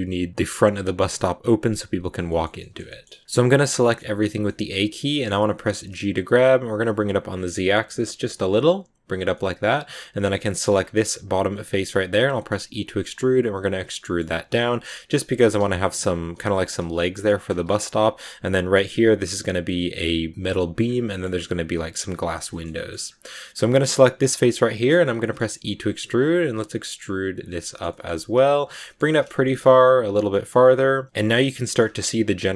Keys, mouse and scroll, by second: 3.0 a, 3.7 shift+middle click, 4.0 a, 4.2 a, 4.3-5.7 middle drag, 5.7 g, 9.2-10.5 middle drag, 10.5 right click, 10.7-11.5 scroll up 1, 11.5 scroll up 1, 11.5 middle click, 12.5 e, 13.7 scroll down 3, 13.8 middle click, 14.2 g, 15.2 a, 16.2 g, 17.2 middle click, 17.4 a, 17.5-20.3 middle drag, 20.8 scroll down 2, 21.0 middle click, 21.9-22.4 scroll up 1, 22.4 shift+middle click, 22.6-24.0 scroll up 2, 24.1 right click, 24.4-25.1 scroll down 5, 24.5 shift+middle click, 25.1 middle click, 25.4 e, 27.5 shift+middle click, 28.0 g, 28.7 shift+middle click, 29.3 g, 30.1 scroll down 1, 30.2 middle click, 31.1 a, 31.1 middle click, 31.7 scroll up 1, 32.3-32.5 middle drag.